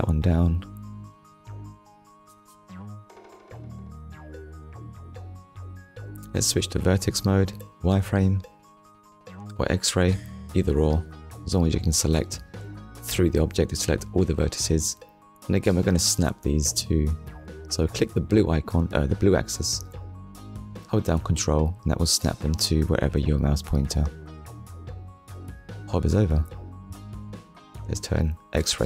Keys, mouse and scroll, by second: 2.5 scroll up 1, 3.2 shift+middle click, 3.9 scroll up 1, 5.2 Tab, 6.6 click, 9.1 click, 14.0 click, 15.4 middle click, 17.1 KP_1, 18.5 click, 21.3 click, 23.2 click, 26.3 click, 28.0 click.